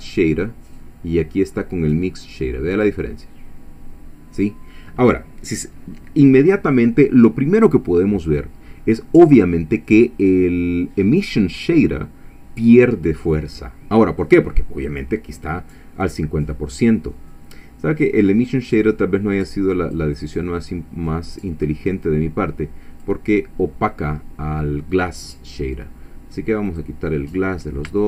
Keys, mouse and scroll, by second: 0.7-3.0 drag, 19.5 click, 22.1-23.2 drag, 26.7 click, 27.3 middle click.